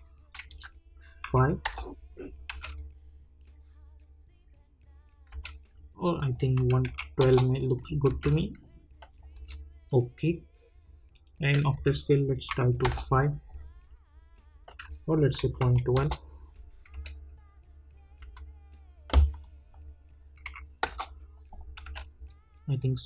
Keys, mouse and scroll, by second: 1.6 Return, 2.5 space, 5.3 space, 6.2 click, 7.2 Return, 8.1 space, 11.7 click, 12.8 Return, 15.7 click, 15.9 Return, 16.9 space, 19.3 click, 20.8 Return, 21.8 space.